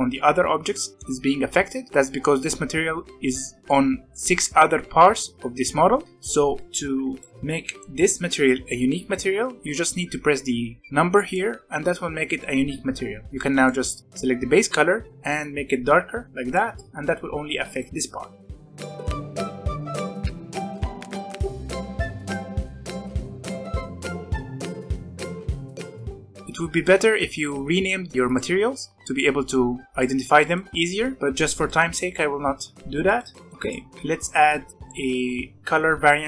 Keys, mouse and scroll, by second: 6.8 alt+a, 7.1 click, 7.3-7.9 scroll up 1, 11.2-13.6 drag, 17.0 alt+a, 17.7 click, 18.1 click, 18.6 scroll down 2, 18.8 alt+a, 19.0 click, 19.9 click, 20.8 middle click, 21.0 click, 21.4 middle click, 21.5 alt+a, 21.6 middle click, 21.7 scroll up 1, 21.8 click, 21.9 shift+middle click, 22.5 click, 22.9 middle drag, 23.0 scroll down 1, 23.1 middle click, 23.3 ctrl+z, 23.4 middle drag, 23.5 alt+a, 24.0 click, 24.6 alt+a, 24.9 click, 25.6 scroll up 1, 25.7 middle click, 25.7 scroll down 1, 25.8 shift+middle click, 25.9 alt+a, 26.0 click, 26.7 click, 27.7 click, 28.2 click, 30.4 shift+middle click, 31.0 alt+a, 31.3-33.5 middle drag, 33.5 click, 33.9 Tab, 34.3 scroll up 1, 34.7 ctrl+click.